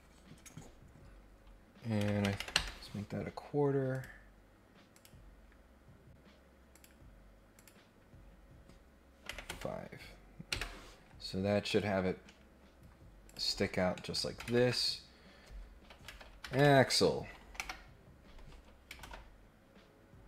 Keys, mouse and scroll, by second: 3.9 click, 4.9 click, 6.7 click, 7.5 click, 11.3 scroll down 1, 11.6 middle click, 12.0 scroll up 1, 12.2-12.9 scroll down 3, 13.2 click, 13.9 middle click, 19.0 ctrl+Tab.